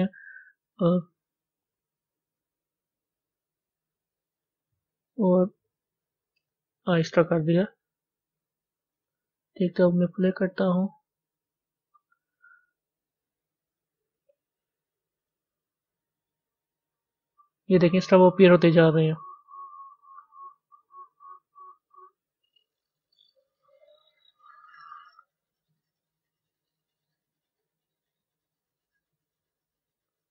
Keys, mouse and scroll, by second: 0.8 g, 7.6-12.0 drag, 13.7 click, 15.2 click, 19.8 scroll down 1, 22.7-30.3 drag.